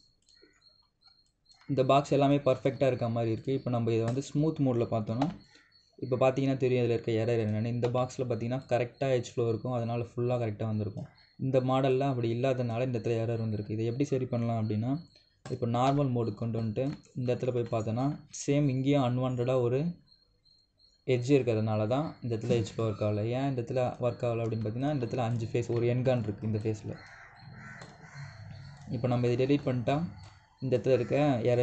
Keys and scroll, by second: 5.9 3, 8.6 3.